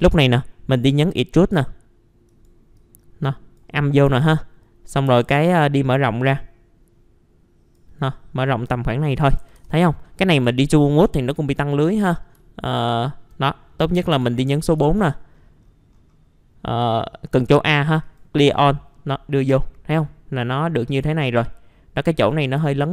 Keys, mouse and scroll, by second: 0.7 click, 1.4 scroll up 1, 2.3 right click, 2.7 click, 3.8 middle click, 4.1 F3, 4.3-5.1 scroll up 1, 5.1 F3, 5.4 right click, 5.7-8.9 drag, 8.9-9.4 scroll down 1, 10.0 middle click, 10.3 F4, 10.8-11.3 scroll down 1, 11.3 middle click, 12.6 alt+middle click, 13.4 middle click, 14.8 ctrl+a, 15.6-16.5 scroll down 1, 16.9 click, 20.0-22.2 alt+middle drag, 22.6 alt+w.